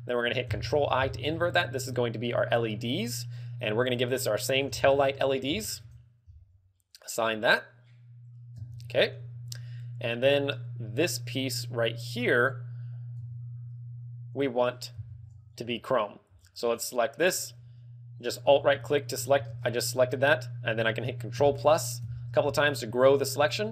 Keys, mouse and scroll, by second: 0.5 ctrl+i, 1.6 middle click, 3.7 click, 6.9 click, 7.2 click, 8.8 Tab, 10.5 right click, 13.5 Tab, 15.1 l, 15.8 a, 16.7 alt+right click, 18.5 scroll up 2, 18.8 shift+middle click, 19.0 shift+middle click, 19.6 shift+space, 20.6 scroll down 3, 21.3 ctrl+KP_Add, 21.9 ctrl+KP_Add, 22.7 z, 23.4 z.